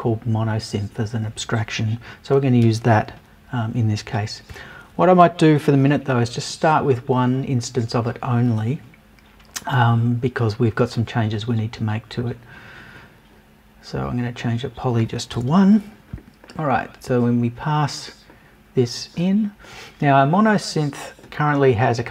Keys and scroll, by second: 15.3 BackSpace.